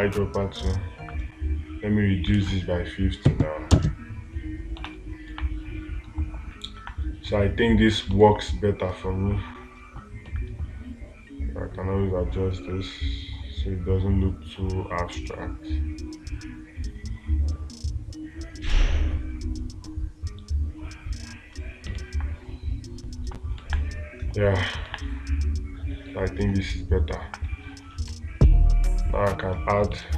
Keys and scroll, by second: 5.7 space, 8.7 space, 22.4 space, 24.0 space, 25.3 space.